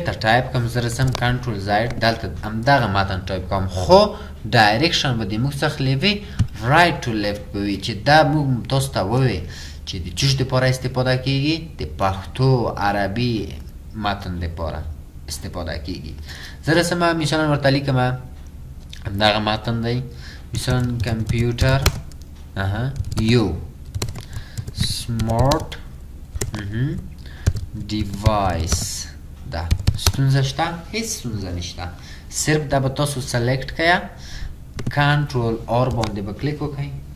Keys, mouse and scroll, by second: 1.1 ctrl+ئ, 20.6-30.4 typing, 21.3 click, 24.6 click, 35.9 ctrl+ق.